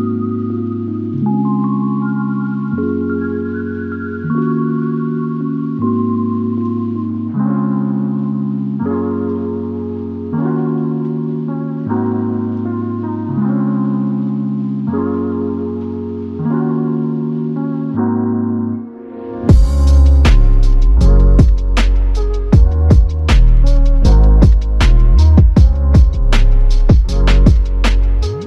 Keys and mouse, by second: 4.9 double click, 7.8 double click, 7.9 shift+click, 10.3 ctrl+click, 20.5 alt+click, 22.5 alt+click.